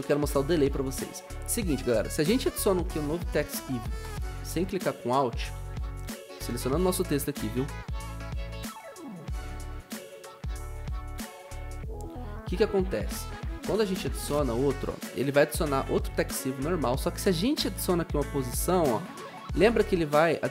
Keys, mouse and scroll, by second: 5.5 ctrl+z.